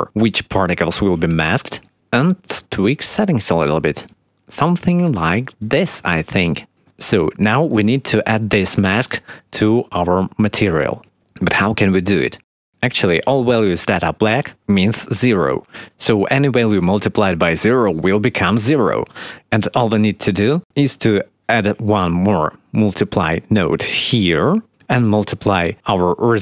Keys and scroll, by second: 21.8 shift+d.